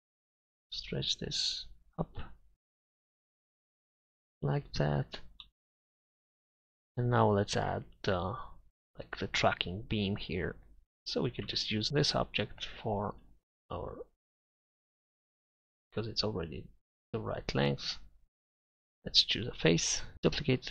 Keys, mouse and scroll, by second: 4.7 Tab, 5.0 z, 11.2-12.6 right drag, 11.5 Tab, 20.5 shift+d.